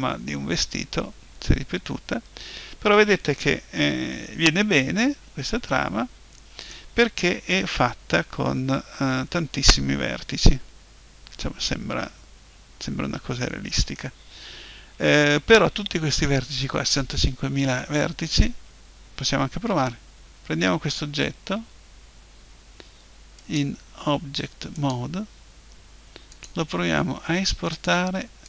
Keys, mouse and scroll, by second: 10.4-12.2 middle drag, 19.9 Tab, 21.0 Tab, 23.4-25.2 drag, 26.3-28.1 drag.